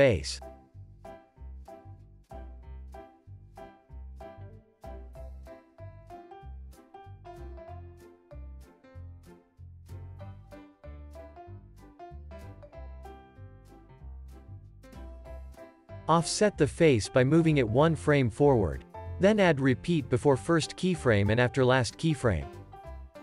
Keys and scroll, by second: 3.3 super+c, 5.8 super+s, 8.8 alt+z, 9.4 x, 10.5 super+v, 16.9 c, 18.4 alt+w, 18.8 super+s.